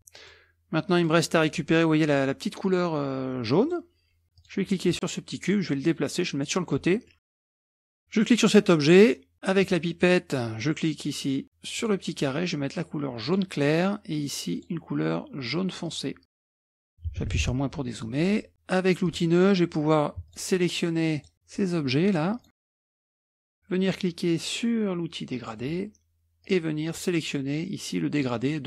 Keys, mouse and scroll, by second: 0.0 click, 0.9 click, 3.6 click, 4.4 click, 4.7 scroll up 1, 5.5-6.8 drag, 6.9-7.7 scroll up 1, 7.7 click, 7.9 click, 9.6 click, 11.8 click, 13.3 click, 14.6 click, 15.9 click, 16.6 click, 17.1 KP_Subtract, 17.3 KP_Subtract, 17.5 KP_Subtract, 17.9-18.3 scroll up 3, 18.0 middle click, 18.3-18.8 scroll down 2, 18.8 scroll down 1, 19.1 click, 19.6-20.1 scroll down 2, 20.3 shift+click, 21.2 shift+click, 22.1 shift+click, 22.7 shift+click, 23.3 shift+click, 25.4 click, 26.5-28.6 drag.